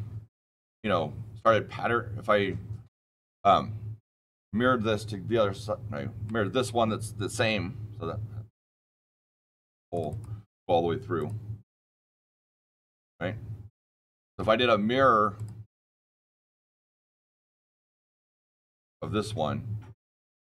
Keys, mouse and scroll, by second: 6.2 click, 7.3-8.5 shift+middle click, 7.8 shift+middle click, 9.8 click, 10.0 click, 11.1 click, 11.9 click, 12.5 click, 13.0-14.3 shift+middle click, 13.5 shift+middle click, 15.3 click, 16.3 click, 16.4-17.0 scroll, 17.6 click, 18.1 click, 18.8 click, 20.1 click.